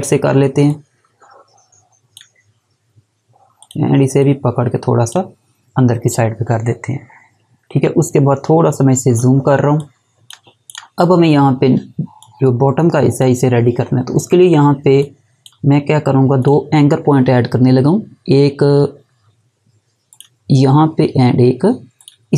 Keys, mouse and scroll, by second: 8.7 scroll up 1, 9.5 space, 9.8 click, 10.0 space, 10.6 click, 20.1 click.